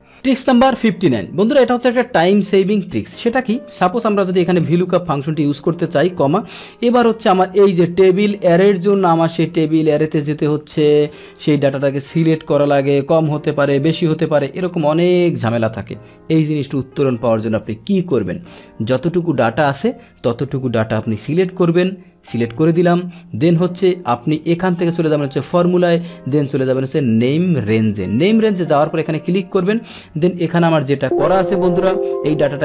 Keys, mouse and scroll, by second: 0.0 click, 3.2 click, 4.8 Tab, 5.2 Left, 5.7 Left, 6.1 click, 9.3-10.3 drag, 11.3-15.2 drag, 16.7 BackSpace, 18.8-20.2 middle drag, 20.2 click, 21.0 ctrl+shift+Down, 21.0 click, 22.0 ctrl+shift+Right, 22.6 ctrl+shift+Right, 24.8 click, 28.2 click, 29.7 click, 30.3 click, 31.2 Delete, 32.0 click.